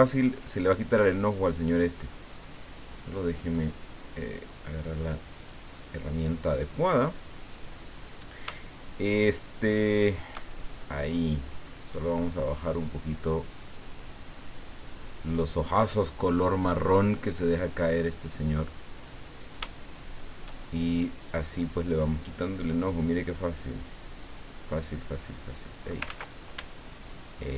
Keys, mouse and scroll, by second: 0.9 ctrl+scroll down 2, 3.1 click, 5.4 click, 7.5 click, 9.7 shift+click, 10.5-15.5 shift+drag, 18.5 click, 19.8 shift+click, 22.2-25.9 drag, 26.1 ctrl+z, 26.7 ctrl+shift+z.